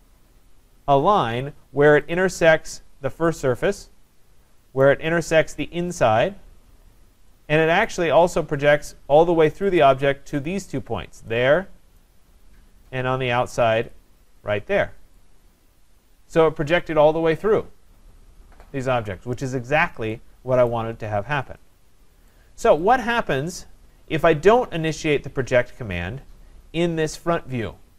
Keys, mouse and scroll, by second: 2.1 click, 3.3 click, 4.8 right click, 5.3 scroll, 6.0 click, 6.9 middle click, 6.9 middle click, 7.9 right click, 8.3 scroll, 9.7 click, 10.5 click, 12.0 right click, 12.2 scroll, 12.8 scroll, 13.9 click, 15.2 click, 19.5 scroll, 20.7 right click, 21.1-22.3 scroll, 22.3 right click, 22.9 click, 24.6 scroll down 4, 25.3 scroll up 4, 25.8 scroll down 2, 27.2 click.